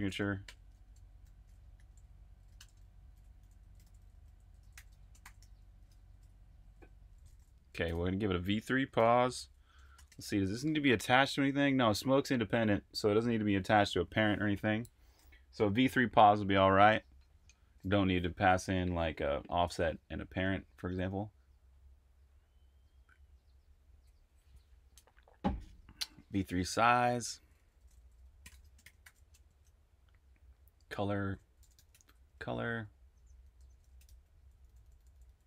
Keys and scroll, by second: 0.0-10.4 typing, 26.3 Escape, 27.0-35.4 typing.